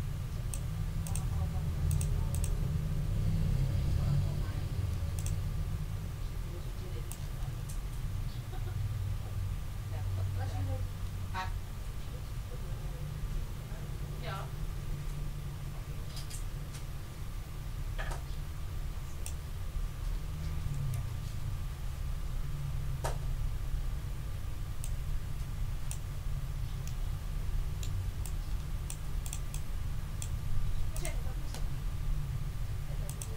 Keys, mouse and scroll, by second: 1.0 click, 1.9 click, 2.3 click, 5.1 click, 7.1-19.4 drag, 20.7 ctrl+shift+f, 24.8-26.1 drag, 26.8-28.0 middle drag, 28.2 click, 29.2 click, 30.9 click, 33.0 click.